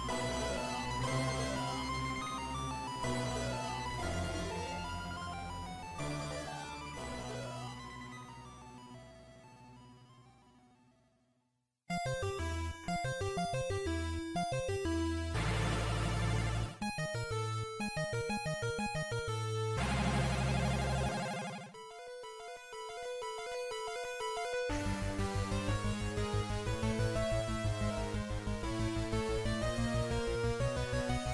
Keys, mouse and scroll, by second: 5.9 click, 10.8 click, 12.9 click, 20.3 click, 22.9 click, 24.1 z, 27.6-28.2 scroll down 1, 28.3 scroll down 2, 30.5 click.